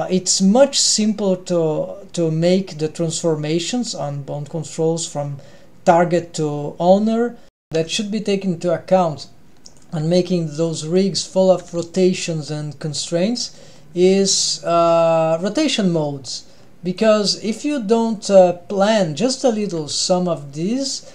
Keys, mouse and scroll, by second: 7.7 ctrl+alt+shift+super+r, 8.5 n, 8.9 middle click, 9.7 click, 9.9 g, 10.9-11.3 middle drag, 11.6 g, 13.5 middle click, 14.1 g, 15.3 click, 18.1 click, 19.6 drag, 19.8 g, 20.7 middle click.